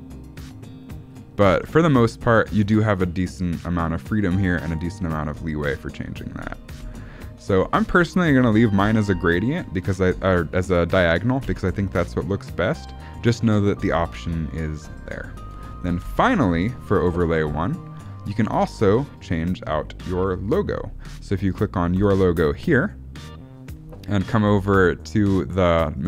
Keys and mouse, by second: 1.5 ctrl+z, 6.8 space, 7.6 ctrl+z, 7.9 ctrl+z, 8.3 ctrl+z, 8.8 ctrl+z, 11.3 space, 15.5 space, 15.9 shift+Left, 21.9 click.